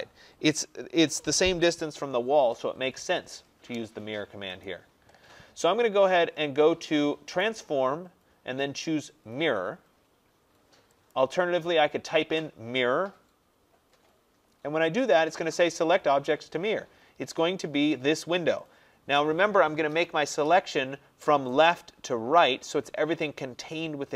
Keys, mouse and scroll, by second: 4.7 click, 7.5 click, 11.2 click.